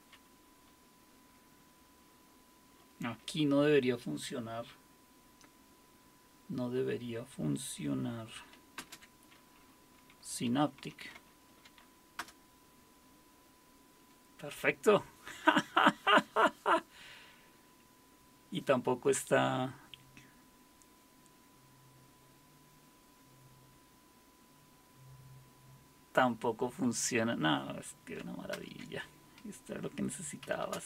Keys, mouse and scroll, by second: 8.8 super+space, 10.2-12.0 typing, 12.2 Return, 28.5 super+Return, 30.2-30.8 typing.